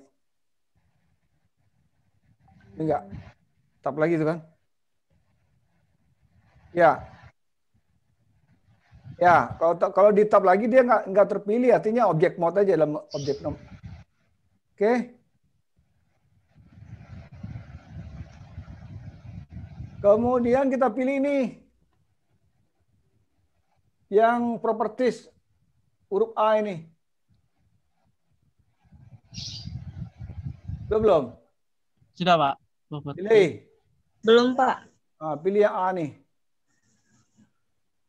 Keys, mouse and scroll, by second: 3.0-3.8 scroll up 4, 3.8 scroll down 1, 3.9 scroll down 1, 4.9 middle click, 33.1 click, 35.8 click.